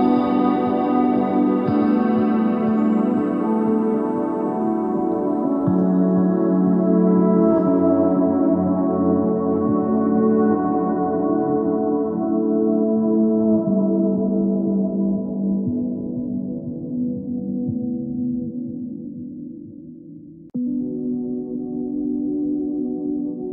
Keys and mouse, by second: 0.8 Tab, 1.7 ctrl+z, 1.8-3.6 ctrl+z, 8.6 e, 9.8 ctrl+z, 11.8 e, 14.0 click, 16.8 s, 18.3 s, 19.8 Tab, 21.7 KP_3, 22.1 KP_1, 22.5 ctrl+Tab, 23.3 ctrl+Tab.